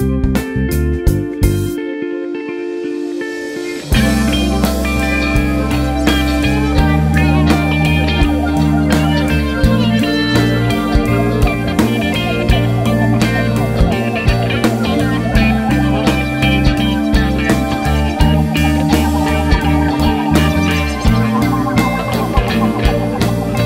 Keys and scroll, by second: 23.3 ctrl+space.